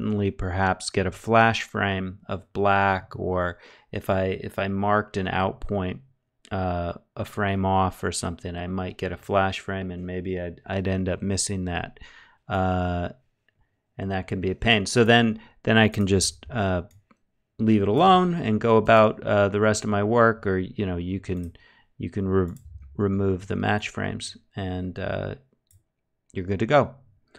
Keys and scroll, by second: 15.7 w, 17.6 e, 22.2 shift+q.